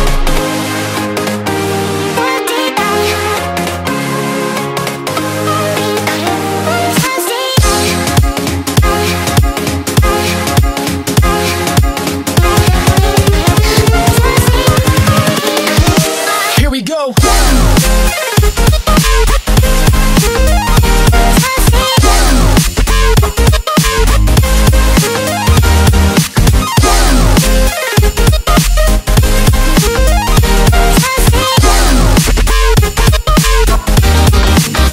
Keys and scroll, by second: 1.3 super+k, 2.8-4.1 typing, 5.0 Page_Down, 7.5 space, 8.0 alt+super+space, 8.1 alt+super+space, 8.2 alt+super+space, 8.3 alt+super+space, 8.4 alt+super+space, 9.8 Down, 12.7 Left, 13.1 Left, 17.4 space, 17.9 space, 18.0 space.